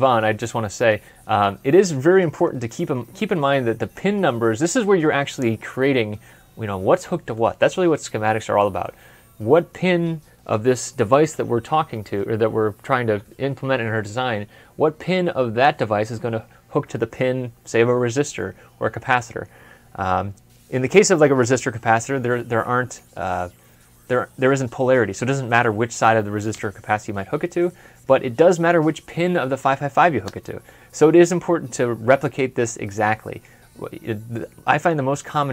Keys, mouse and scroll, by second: 0.6 ctrl+F11.